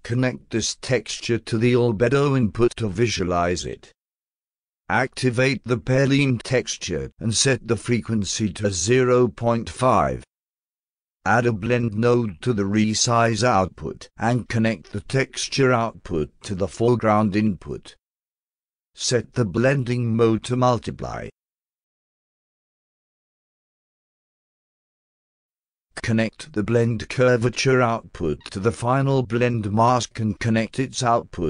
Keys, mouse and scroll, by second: 1.0-2.7 drag, 4.6 click, 5.2 a, 7.8 click, 8.6 0, 9.3 5, 12.2 click, 13.3 click, 15.4-17.0 drag, 20.0 click, 20.8 click, 22.2 click, 23.9-25.3 alt+drag, 25.5 alt+middle click, 27.3-28.4 drag, 30.5-31.4 drag.